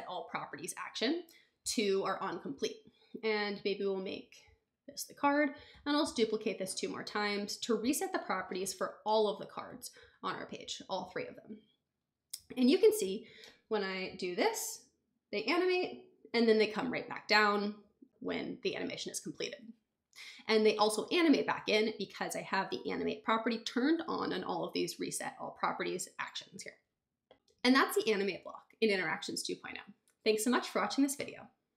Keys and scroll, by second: 0.0-0.2 typing, 0.3 Return, 5.7 super+d.